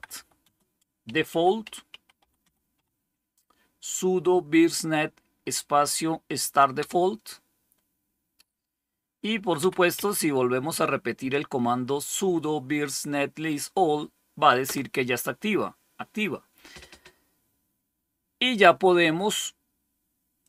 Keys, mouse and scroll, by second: 0.0-3.1 typing, 6.4-7.2 typing, 9.2-10.3 typing, 14.5 Return, 20.3 click.